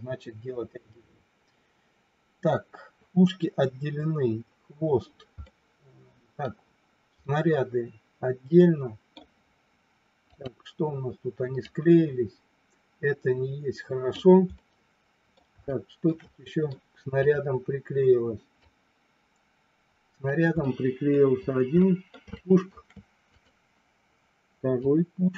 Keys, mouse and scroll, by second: 5.4-6.4 middle drag, 7.2-9.2 middle drag, 11.6-14.1 drag, 14.6 middle click, 15.7 shift+middle click, 16.2 scroll up 1, 16.5 middle click, 16.6 scroll down 1, 17.2 click, 18.6-20.4 drag, 20.6 middle click, 21.7-22.4 scroll up 2, 21.8 middle click, 22.2 shift+middle click, 23.2 click, 24.8-25.3 drag.